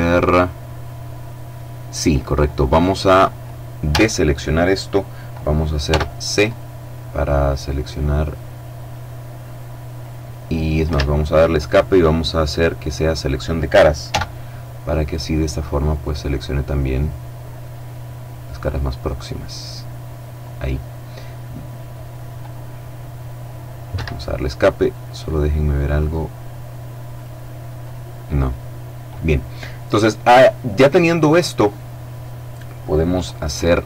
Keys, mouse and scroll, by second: 3.0 a, 5.0 c, 5.6-9.6 drag, 10.0 Escape, 11.6 click, 13.2 c, 14.0-20.0 drag, 23.1 Escape, 24.2-25.7 middle drag, 26.3 click, 26.9 click.